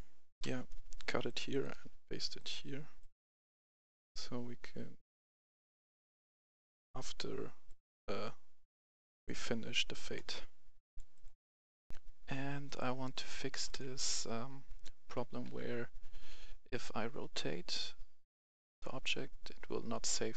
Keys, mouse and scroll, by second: 0.4 ctrl+x, 1.0 right click, 1.5 click, 1.7 v, 2.3-4.3 drag, 5.4-7.3 right drag, 7.6-9.7 drag, 9.7 right click, 10.8 click, 11.8 right click, 12.6 click, 13.7 w, 14.0 a, 15.4 e.